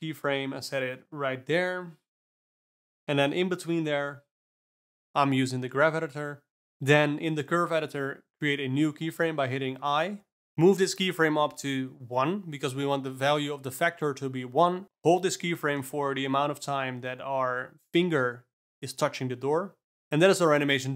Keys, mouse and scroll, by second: 0.2 shift+d, 2.1 click, 3.3 click, 3.9 click, 8.2 click, 9.1 g, 11.5 click, 14.8 click, 14.9 shift+d, 17.5-20.5 drag.